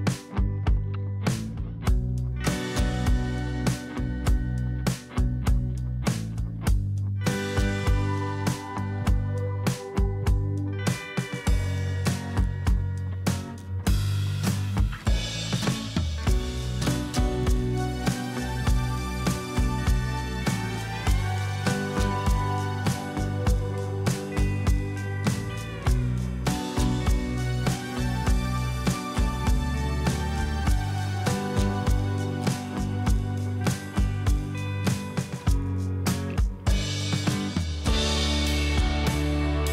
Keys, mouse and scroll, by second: 1.6-2.4 typing, 9.0 right click.